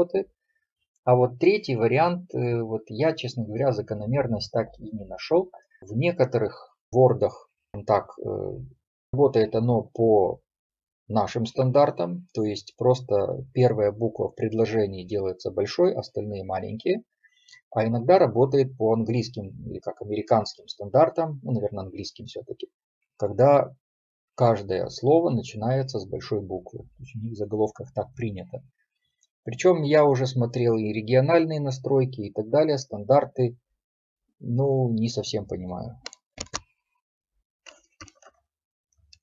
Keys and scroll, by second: 38.4 shift+F3.